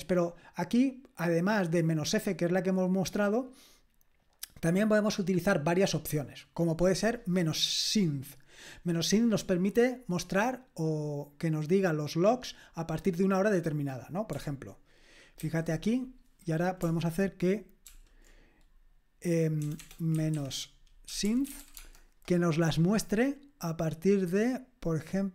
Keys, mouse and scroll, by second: 0.2-0.6 scroll down 1, 6.8 click, 15.4 ctrl+c, 17.8 ctrl+p, 19.6-22.1 typing.